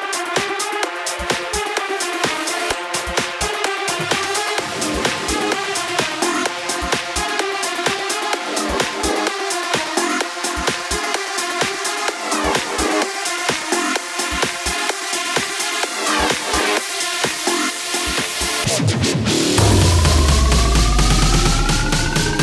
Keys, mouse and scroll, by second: 3.4 click, 8.2 KP_0, 9.3 z, 15.1 click, 20.6-22.4 drag.